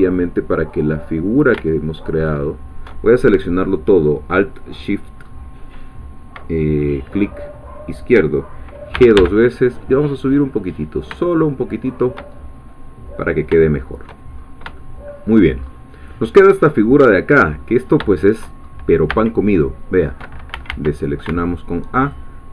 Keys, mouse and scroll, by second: 0.7 click, 2.2 alt+shift+click, 3.0-5.1 alt+shift+scroll down 2, 5.1-8.9 scroll up 1, 8.9 g, 11.9 shift+click, 12.4-13.5 shift+scroll down 1, 13.6 shift+middle click, 14.4 shift+scroll up 1, 14.8 shift+middle click, 15.6-17.2 shift+scroll up 3, 17.2-18.0 scroll down 1, 18.1 shift+middle click, 18.9 scroll up 2, 19.1 a, 22.0-22.5 alt+shift+drag.